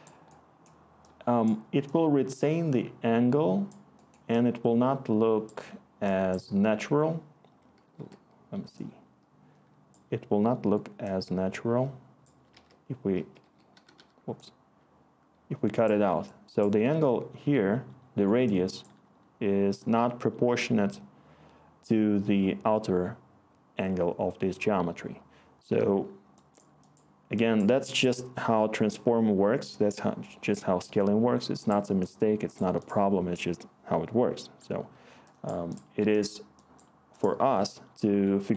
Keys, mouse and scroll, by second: 7.9 e, 12.5-14.4 typing.